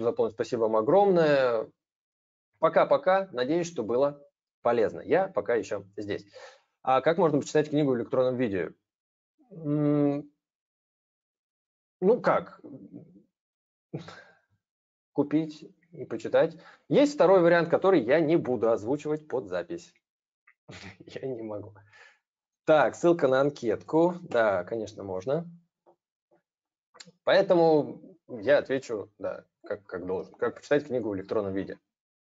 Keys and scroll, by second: 23.4 ctrl+v.